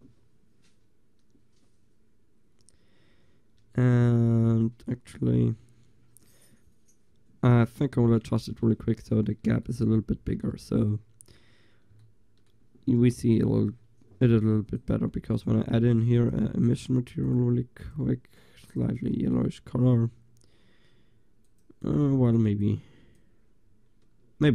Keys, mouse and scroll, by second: 3.0 middle click, 4.0 click, 4.0 middle click, 4.1 click, 4.3 click, 8.8 middle click, 8.9-9.7 middle drag, 9.7 click, 9.9 drag, 14.8-19.3 drag, 19.3 shift+z, 19.8-21.2 middle drag, 21.2-24.5 drag.